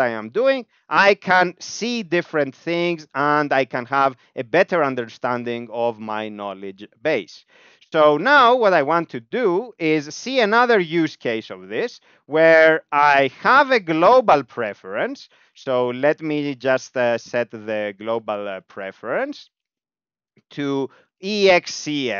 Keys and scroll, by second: 6.9 Down, 7.1 Down, 7.2 Down, 7.9 Return, 10.2 ctrl+/, 12.9 Return, 13.2 Up, 13.5 ., 13.8 ., 14.9-16.7 typing, 18.0 ., 18.7 alt+/, 19.5-22.1 typing.